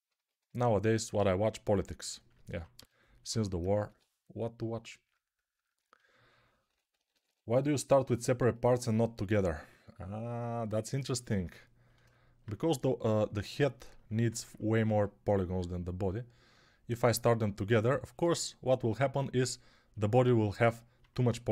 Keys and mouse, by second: 2.6-3.8 typing, 6.5 ], 6.8 [, 7.0 [, 7.1 [.